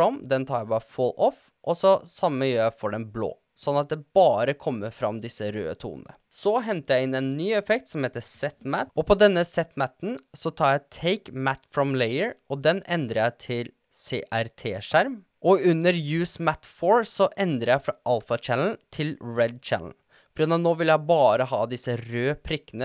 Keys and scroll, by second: 7.7-8.8 typing.